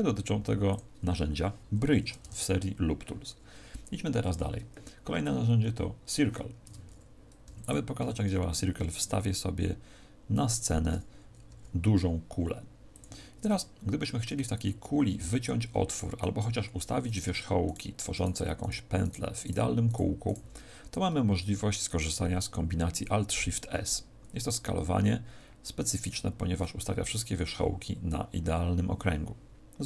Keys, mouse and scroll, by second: 0.7 click, 6.6 Tab, 7.4 x, 8.1 shift+a, 11.5 s, 12.9 click, 13.3 Tab, 14.6 middle click, 17.0 right click, 17.6 shift+right click, 18.1 shift+right click, 19.1 shift+right click, 26.2 alt+shift+s.